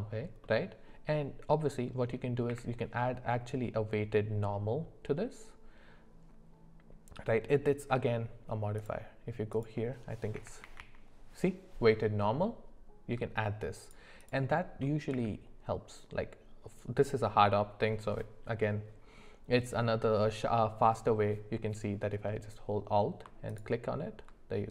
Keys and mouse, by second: 0.4-0.9 middle drag, 2.5 q, 8.8-13.8 drag, 14.2 click, 15.1 q.